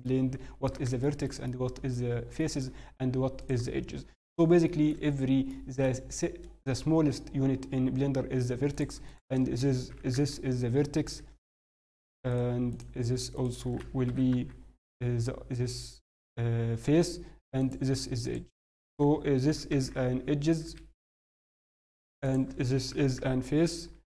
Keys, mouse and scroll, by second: 0.0 click, 0.0 middle click, 1.4 middle click, 2.3 shift+middle click, 3.4 click, 4.1-4.6 scroll up 1, 4.6 shift+middle click, 4.6-5.4 scroll up 2, 5.5 middle click, 6.7-7.7 scroll down 3, 7.1-7.7 scroll up 1, 8.7 click, 8.7 scroll up 2, 9.0 shift+click, 9.9 g, 11.4 click, 11.7 shift+click, 14.0 g, 17.6 click, 18.6 click, 19.4 g, 21.4 click, 22.2 click, 22.9 g.